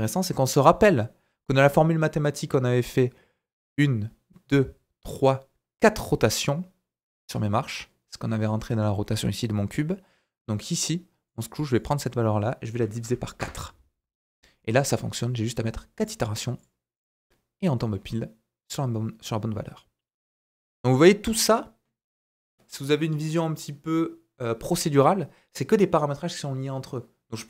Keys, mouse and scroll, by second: 11.2 click, 16.0 click, 16.6 click, 16.9 click, 20.3 middle click.